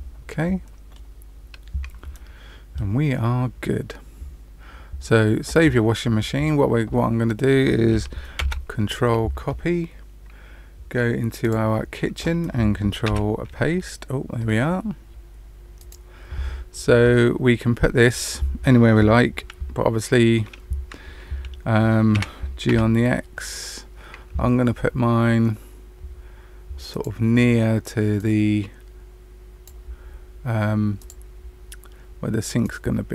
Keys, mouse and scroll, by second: 1.3-2.0 scroll down 2, 2.1 middle click, 8.4 ctrl+c, 13.0 ctrl+v, 15.7 click, 22.0 g, 28.2 click, 31.1 click, 32.6 click.